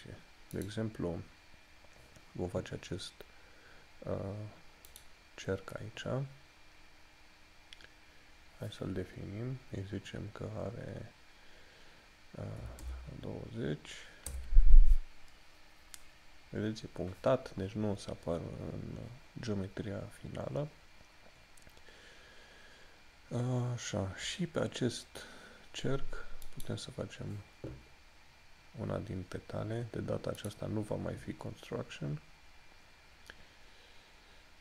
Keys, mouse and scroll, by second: 0.7 click, 5.1 click, 21.3 scroll up 1, 25.0 scroll up 1, 26.6 click, 30.6 click.